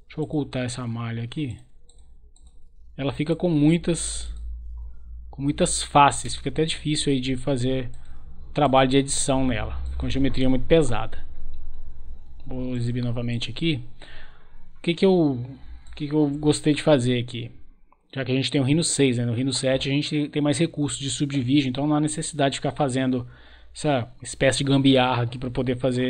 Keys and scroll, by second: 11.1 Delete.